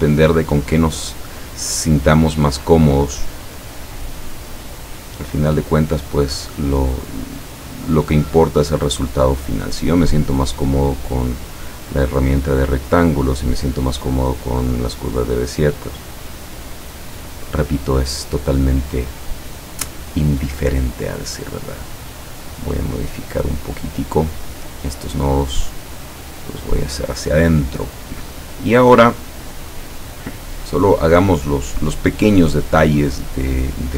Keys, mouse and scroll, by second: 3.9 click, 5.7 click, 10.1 click, 11.2-11.9 drag, 12.9 click, 16.0 click, 16.4 click, 22.3 click, 22.8 click, 24.3 click, 25.8 click, 33.7 click.